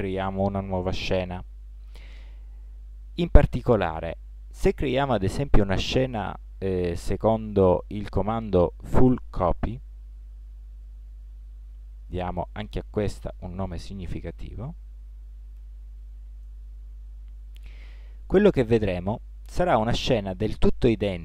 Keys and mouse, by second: 14.6 l, 16.6 l.